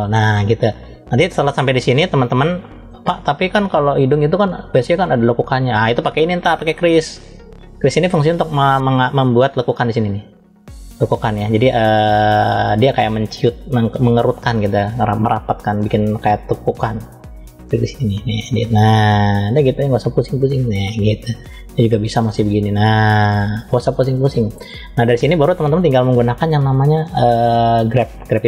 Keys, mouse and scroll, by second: 0.2-0.7 scroll down 2, 0.7 middle click, 1.4-1.9 scroll up 1, 1.9-2.3 scroll up 1, 2.3 middle click, 3.3 click, 5.3 click, 6.4 click, 7.2-7.9 scroll up 2, 7.9 middle click, 8.6 scroll down 1, 17.2 click, 20.4 middle click, 21.6 click, 24.3 middle click, 27.8 click.